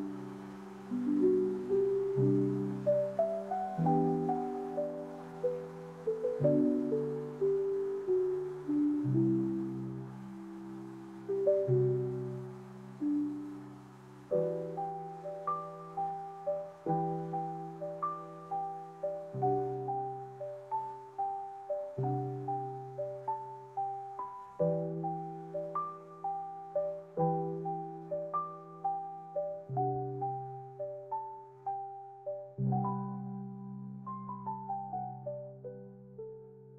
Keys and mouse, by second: 1.3 z, 9.2 shift+a, 13.2 ctrl+alt+KP_0, 16.1 click, 17.4-19.8 drag, 19.2 KP_0, 20.5-22.5 drag, 21.5 KP_0, 27.3 click, 28.5 click, 31.4 r, 31.6 r, 31.8 r, 33.6 g, 34.6 g, 34.6 z, 36.6-36.7 drag.